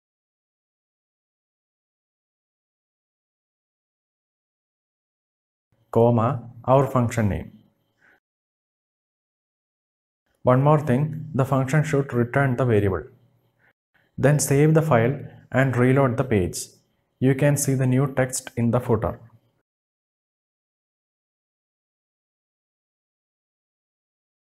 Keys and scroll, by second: 2.8 ctrl+v, 5.5 space, 12.1 space.